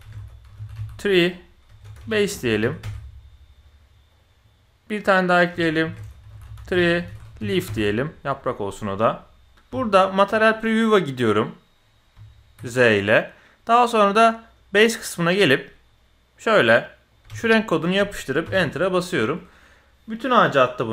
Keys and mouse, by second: 0.7 e, 5.0 click, 5.3-7.7 drag, 6.4 e, 9.5 z, 9.7 z, 12.1 z, 14.4 click, 16.3 click.